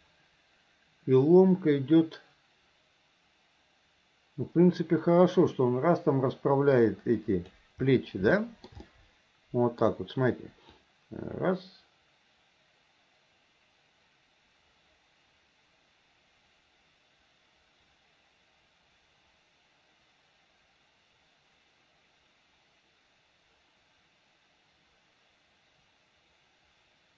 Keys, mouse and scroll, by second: 8.4-8.8 shift+middle drag, 8.9-9.9 middle drag, 10.8-27.1 drag.